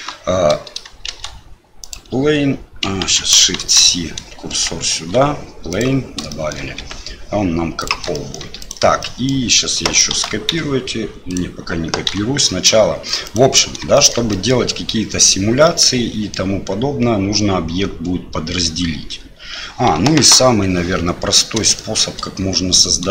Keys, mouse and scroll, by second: 1.0 shift+a, 3.0 ctrl+z, 3.6 shift+c, 4.9 shift+a, 6.4 shift+click, 6.8 s, 8.2 shift+middle click, 8.6 click, 9.0 shift+middle click, 10.1 shift+d, 12.0 Delete, 13.2 click, 13.9 shift+click, 14.3 middle click, 15.6 middle click, 19.9 KP_7, 21.7 shift+click.